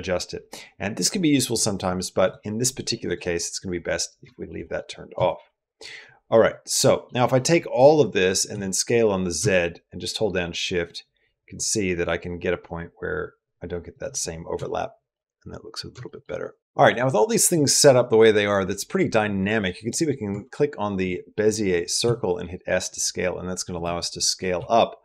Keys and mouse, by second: 2.0 click, 2.5 click, 2.8 click, 4.1 shift+middle click, 4.4 middle click, 5.0 shift+middle click, 6.1 middle click, 7.1 middle click, 7.6 click, 7.9 middle click, 8.3 s, 14.4 shift+middle click, 15.8 shift+middle click, 16.6 click, 20.1 Tab, 21.8 s, 24.0 middle click, 24.3 s.